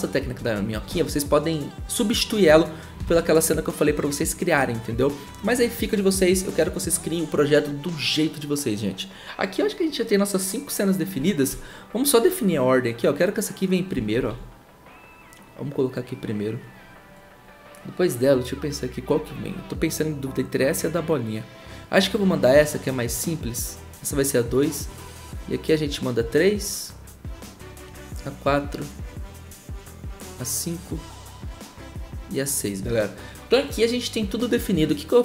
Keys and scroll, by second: 0.8 ctrl+z, 3.0 ctrl+z, 14.2 ctrl+z.